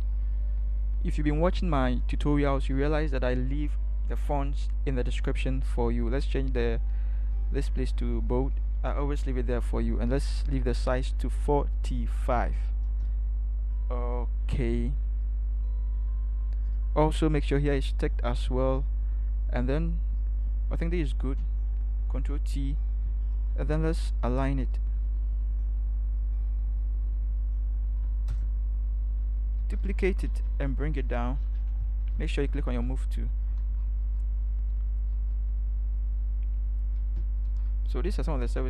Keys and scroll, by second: 11.9-12.8 typing, 22.1 ctrl+t, 27.9 Left, 28.3 Return, 29.6 ctrl+j, 30.2 shift+Down, 30.4 shift+Down, 30.6 shift+Down, 31.3 Down, 32.1 v, 32.3 shift+Down, 37.4 ctrl+c.